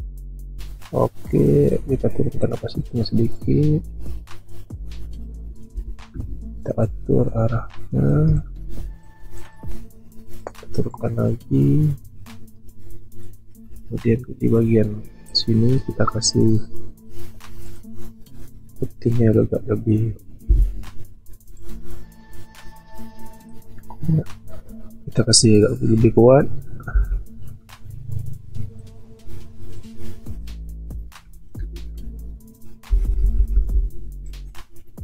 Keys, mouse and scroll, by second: 5.8 ctrl+t, 6.8 shift+click, 20.5 b, 26.9 [, 31.8 ctrl+alt+z, 32.9 1.